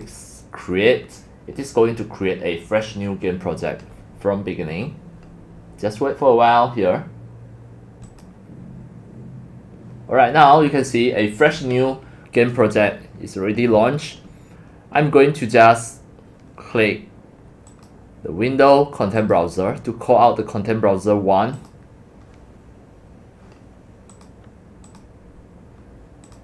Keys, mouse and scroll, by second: 0.5 click, 4.2-5.1 drag, 8.1 click, 8.4 click, 9.8 click, 10.3 click, 11.0 click, 11.9-13.3 drag, 17.7 click, 19.2 click, 21.5 click, 24.1 click, 24.9 click, 26.2-26.4 drag.